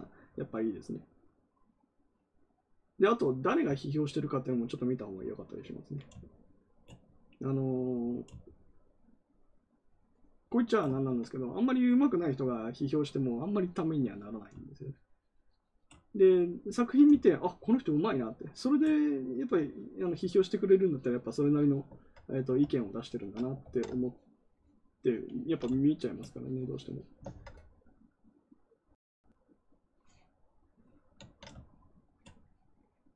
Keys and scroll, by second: 23.5 ctrl+z.